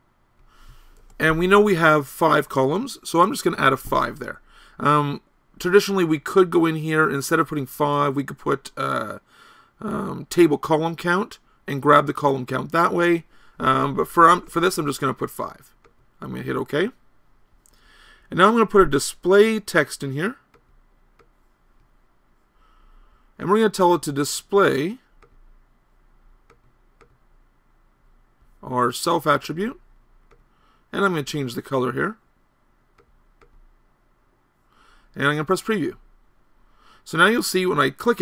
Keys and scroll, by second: 1.1 BackSpace.